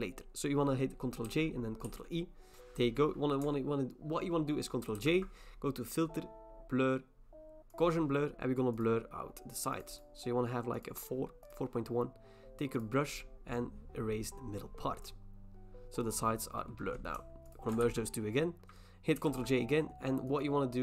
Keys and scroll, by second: 1.2 ctrl+j, 2.4 ctrl+e, 2.5 BackSpace, 5.0 ctrl+j, 17.8 ctrl+e, 19.2 ctrl+j.